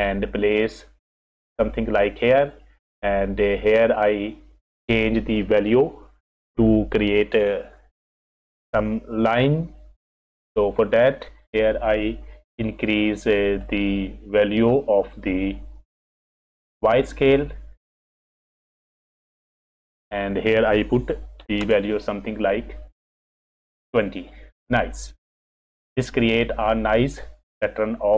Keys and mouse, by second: 1.3 click, 2.2 click, 3.2-4.3 drag, 13.7-17.4 drag, 18.8 ctrl+z, 19.9-23.9 drag.